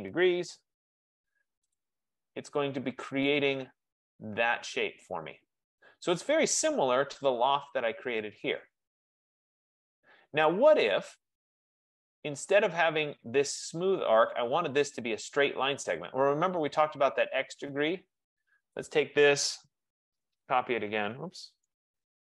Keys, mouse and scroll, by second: 0.0-0.6 typing, 1.9 click, 2.8-3.2 scroll, 3.1 typing, 5.9 right click, 6.1-6.5 scroll, 7.0-7.7 scroll, 7.7 click, 10.6 right click, 15.3 right click, 18.3 middle click, 18.8 scroll, 18.9 click, 19.6-22.2 typing.